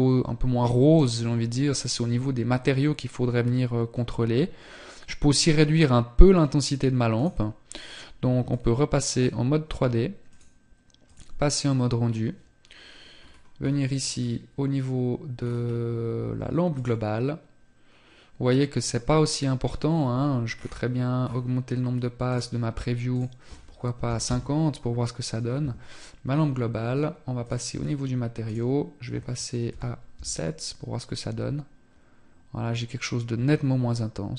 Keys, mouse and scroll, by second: 8.2 click, 12.2-13.5 scroll down 3, 14.8 click, 14.8-16.1 scroll down 4, 19.4 scroll down 9, 21.4 click, 26.5 click.